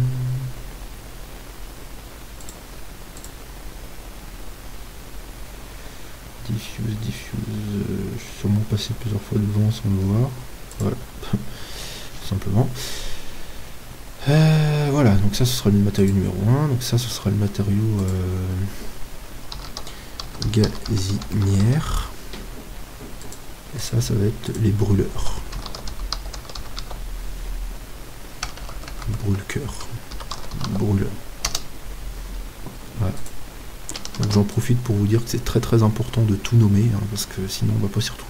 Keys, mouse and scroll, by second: 3.2-17.9 drag, 18.1-26.7 drag, 29.1 BackSpace, 33.2-35.5 drag, 34.3 ctrl+s.